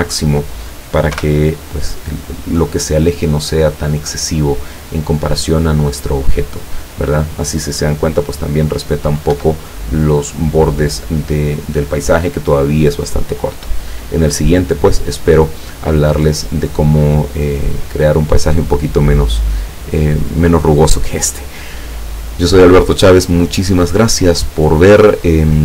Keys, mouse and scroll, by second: 1.2 p, 9.4 Escape.